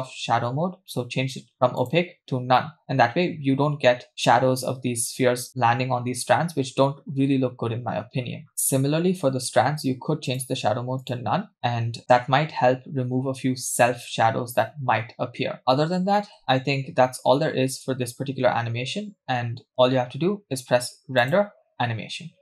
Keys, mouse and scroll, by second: 7.9-8.5 scroll up 2, 8.5 click, 8.5-9.1 scroll down 6, 9.1-9.7 scroll down 3, 9.7-10.3 scroll down 1, 10.3-11.2 drag, 15.6 scroll down 1, 15.6 space, 16.7 space, 17.7-18.5 scroll up 1, 18.5 scroll up 5, 18.5-19.1 scroll down 1, 19.1-19.7 scroll down 1, 19.7-20.1 scroll up 1, 20.1-20.8 scroll down 1, 21.2-22.4 drag.